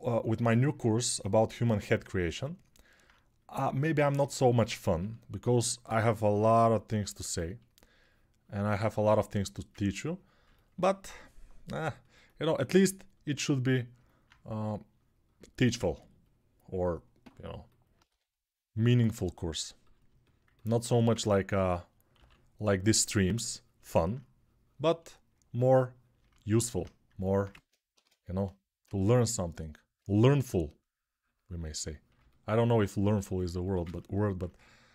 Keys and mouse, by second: 1.5-27.8 alt+drag, 4.5 1, 10.8 g, 17.9 3, 21.9 6, 28.2-34.9 drag, 29.9 1.